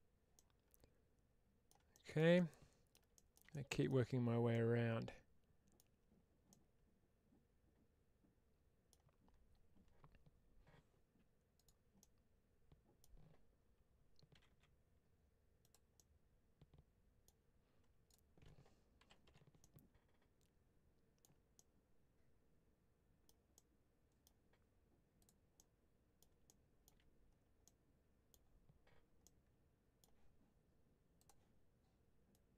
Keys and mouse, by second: 0.3-1.5 middle drag, 2.2 middle click, 3.0 shift+middle click, 3.4 middle click, 4.4-5.6 middle drag, 6.3-8.8 middle drag, 11.8-12.9 middle drag, 14.5 g, 15.5 click, 15.8-17.1 middle drag, 19.5-21.1 middle drag, 21.4-23.1 middle drag, 23.4 middle click, 25.1 click, 25.4 middle click, 27.5 middle click, 29.1 middle click, 32.2-32.5 drag.